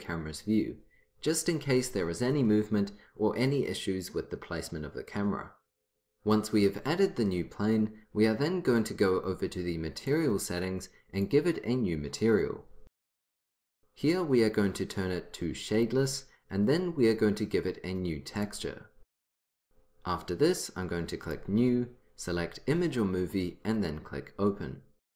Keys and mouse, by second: 10.1-13.3 drag, 15.8-17.7 drag, 18.4-20.3 drag, 21.3-23.1 drag, 25.1 click.